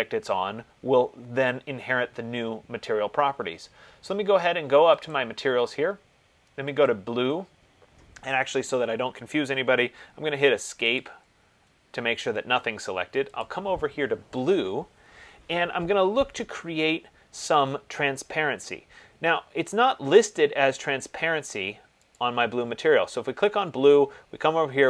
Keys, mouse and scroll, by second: 5.4 click, 7.1 click, 10.2 Escape, 11.2 click, 11.5 Escape, 11.9 Escape, 13.6 click, 20.4 middle click, 22.3 click.